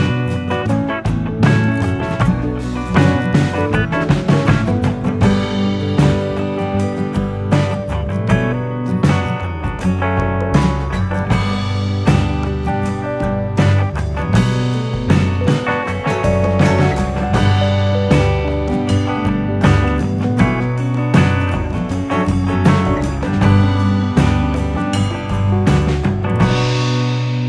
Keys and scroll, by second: 13.4 ctrl+z, 18.0-19.1 typing, 23.3 F9, 23.3 u.